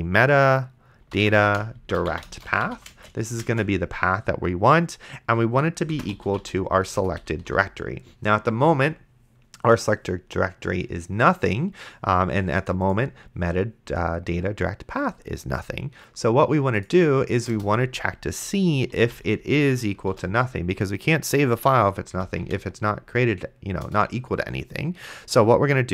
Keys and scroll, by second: 0.8-3.5 typing, 5.8-7.4 typing, 7.0 Return, 17.8 Return, 18.7-20.4 typing, 21.9-23.0 typing, 23.8 Return, 25.8-25.9 typing.